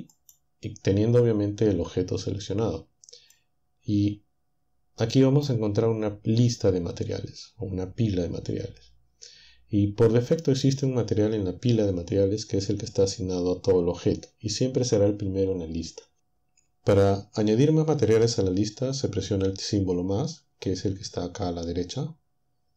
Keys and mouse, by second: 0.2 click, 3.4-5.6 drag.